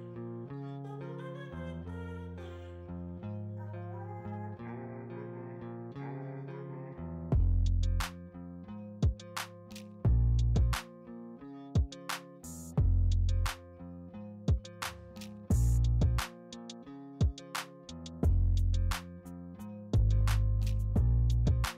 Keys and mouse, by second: 0.6 right click, 5.3 right click, 11.5 right click, 11.6 right click.